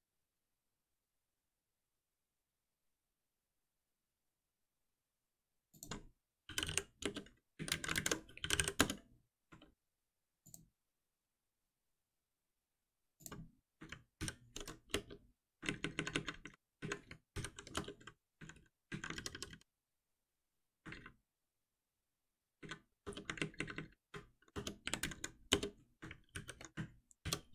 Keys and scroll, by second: 7.0 Return, 7.9 ctrl+shift+Left, 8.7 Return, 14.1 ctrl+alt+n, 19.1 ctrl+y, 26.3 ctrl+alt+l, 27.2 shift+F10.